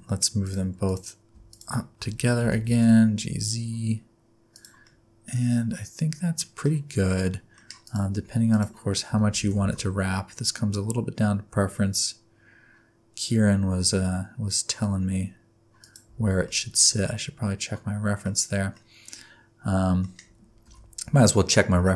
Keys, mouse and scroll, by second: 0.4 click, 0.8 click, 1.5 shift+click, 2.4 g, 4.8 middle click, 7.1 middle click, 7.8 click, 8.5 click, 9.1 Tab, 9.4 a, 9.6 s, 16.0 Tab, 16.4 middle click, 18.3 scroll up 2, 18.6 scroll down 1, 18.7 middle click.